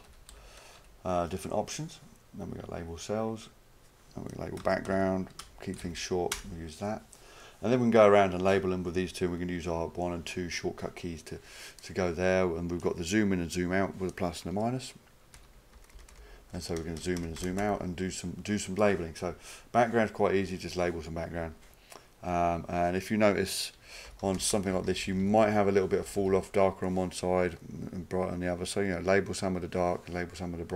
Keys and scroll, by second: 0.0-0.8 typing, 4.9-6.3 typing, 6.4 Return, 9.4-10.4 typing, 15.4 -, 23.8-26.2 typing.